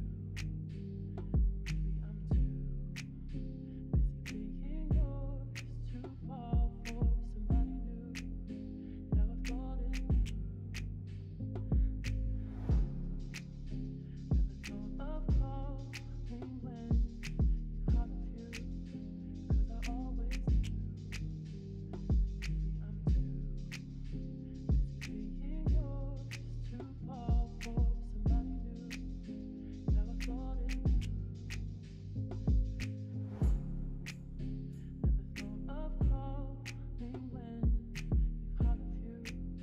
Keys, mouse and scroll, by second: 3.2 ctrl+r, 10.8 ctrl+d, 13.1 ctrl+r, 16.7 middle click, 18.8 shift+click, 20.8 click, 22.7 shift+click, 23.6 middle click, 27.7 g, 31.6-33.9 s, 34.2 middle click, 34.8 click, 35.2 middle click, 39.5 middle click.